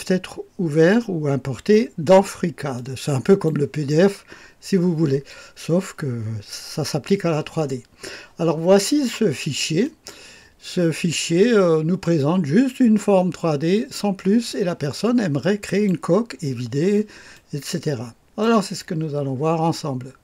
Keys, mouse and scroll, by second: 2.8 click, 9.8 click, 11.1-14.5 drag, 15.4 click, 16.0 click, 17.3-18.9 drag.